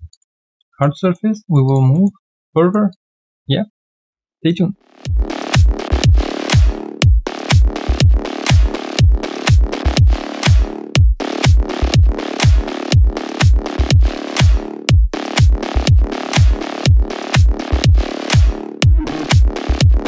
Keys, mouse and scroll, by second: 0.4 alt+middle click, 0.6 alt+click, 1.0 alt+middle click, 1.4 alt+right click, 1.6 alt+click, 1.9 alt+middle click, 2.2 alt+click, 2.5 alt+middle click, 2.9 alt+click.